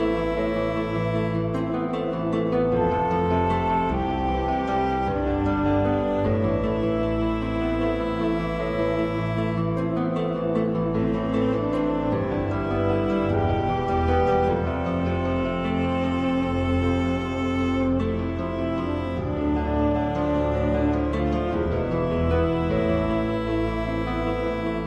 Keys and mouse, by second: 0.8-1.9 middle drag, 5.0 KP_7, 7.2 alt+e, 12.3 middle click, 13.7 middle click, 14.4 click, 15.4 KP_1, 16.5 shift+middle click, 18.1 i, 22.5 middle click.